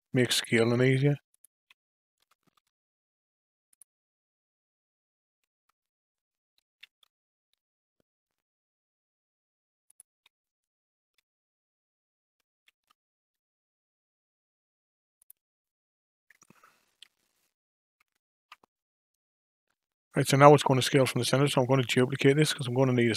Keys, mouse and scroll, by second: 2.2 Tab, 2.5 q, 6.8 shift+s, 11.1 q, 12.6 shift+s, 16.8 KP_5, 17.0 KP_1, 18.3 ctrl+KP_1, 21.4 shift+d.